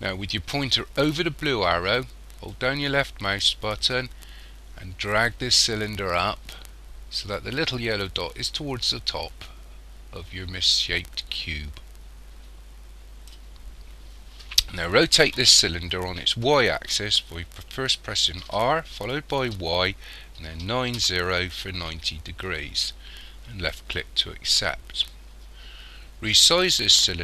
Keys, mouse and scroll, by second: 2.5 click, 18.5 r.